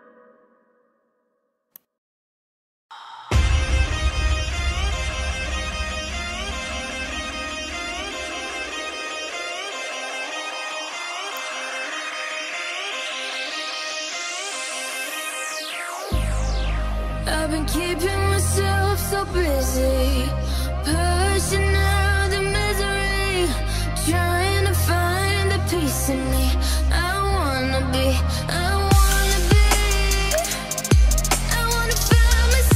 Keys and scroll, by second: 5.9-9.0 typing.